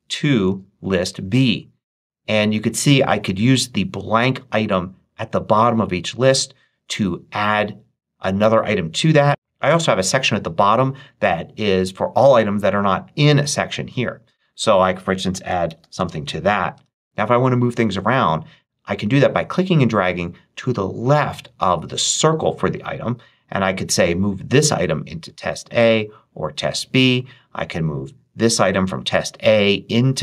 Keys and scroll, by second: 0.0-0.3 typing, 14.9-16.2 typing, 16.6 Return.